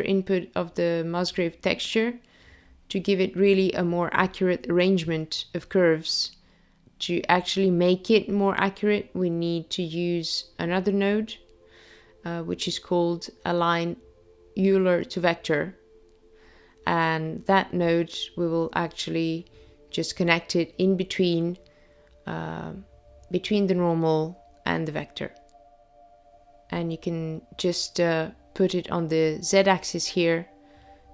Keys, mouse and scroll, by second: 0.4 click, 5.2 middle click, 10.0 shift+middle click, 13.3-13.6 scroll down 3, 14.2 shift+middle click, 17.8 shift+a, 28.0 click.